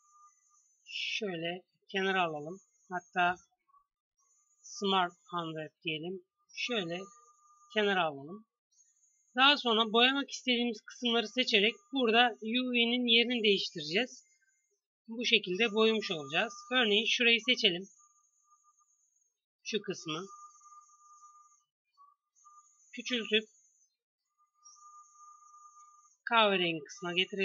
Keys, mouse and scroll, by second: 0.5 g, 3.2 u, 6.2 g, 16.3 a, 16.5 c, 20.4 s, 22.2 s, 22.9 g, 25.5 s, 26.2 g.